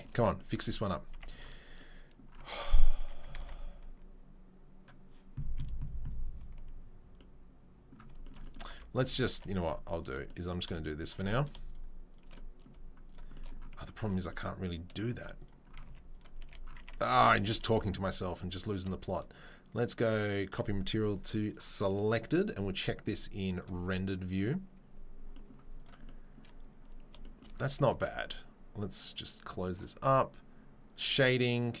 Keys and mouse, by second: 3.0 Tab, 3.2 ctrl+middle click, 3.7 ctrl+s, 7.9-8.3 shift+right drag, 8.7 Tab, 9.3 Tab, 9.3 Tab, 12.2 3, 13.0 shift+click, 13.0 shift+middle click, 13.0 shift+right click, 13.7 z, 14.5 right click, 15.1 z, 16.2-31.8 right drag, 16.2 z, 16.4 a, 16.8 Tab, 17.1 a, 19.8 click, 20.5-24.3 drag, 25.8 click, 25.8 middle click, 29.2-31.8 drag, 29.2-31.8 middle drag.